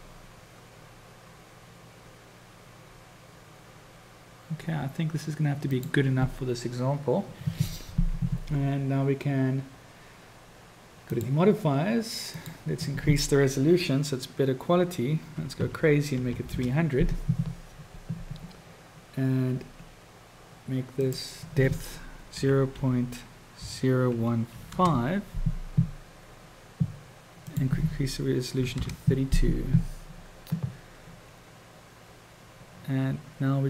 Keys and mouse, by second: 11.1 click, 12.5-17.7 drag, 16.2 o, 21.2-26.4 drag, 27.4-29.8 drag.